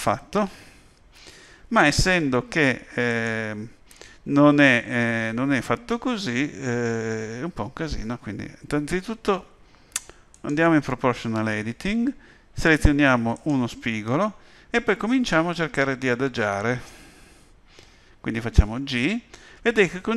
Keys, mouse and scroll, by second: 3.1 click, 10.3 click, 18.5 g.